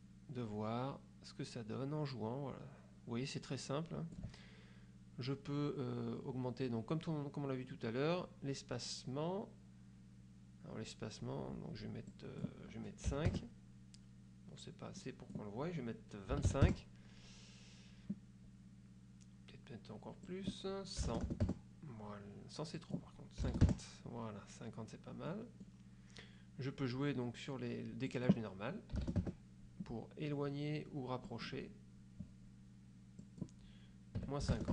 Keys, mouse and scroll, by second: 7.8 scroll up 2, 8.4 scroll up 2, 11.4-11.8 scroll up 2, 12.2 click, 13.2 KP_5, 13.4 KP_Enter, 15.1 click, 16.4 KP_2, 16.6 KP_5, 16.8 KP_Enter, 20.4 click, 21.1 KP_1, 21.5 KP_Enter, 22.9 click, 23.6 KP_5, 23.8 KP_Enter, 25.4 click, 28.2 click, 29.1 KP_0, 29.3 KP_Enter, 31.4 click, 33.4 click, 34.3 KP_Subtract, 34.6 KP_5.